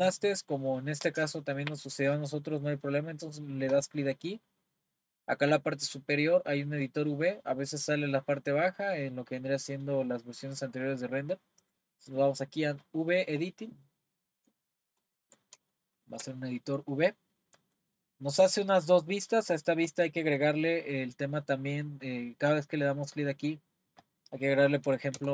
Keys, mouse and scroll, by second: 3.7-6.7 drag.